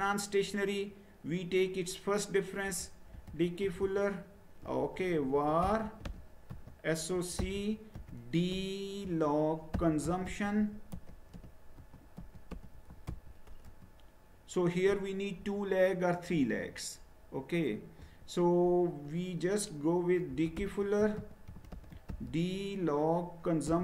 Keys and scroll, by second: 2.4-13.5 typing, 13.6 Return, 20.1-23.8 typing.